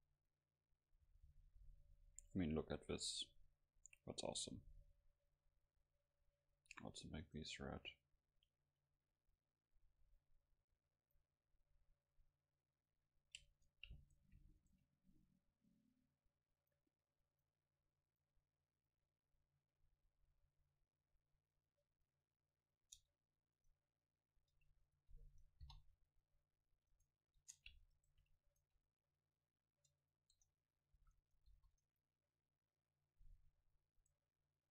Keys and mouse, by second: 1.1 F12, 4.4-6.5 middle drag, 7.3-9.1 right drag, 9.9-11.0 middle drag, 11.1-14.6 drag, 13.5 Tab, 14.0-16.7 right drag, 16.1-20.2 drag, 20.5-22.3 drag, 23.0 Tab, 23.6-24.9 right drag, 25.6 ctrl+l, 27.6 Tab, 28.5-32.3 drag, 29.4 right click, 30.3 Tab, 31.0 a, 31.5 ctrl+s, 34.0-34.7 right drag.